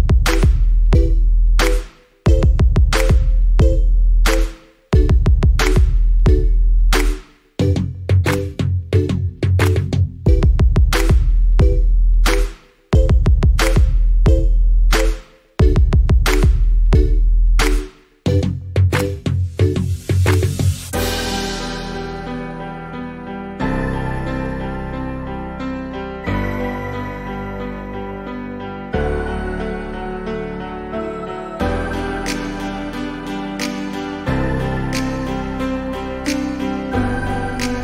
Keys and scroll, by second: 4.0 ctrl+j, 6.5 Down, 9.1 Up, 16.9 ctrl+j, 20.3 Down, 22.0 Up, 25.9 Up, 36.2 ctrl+g.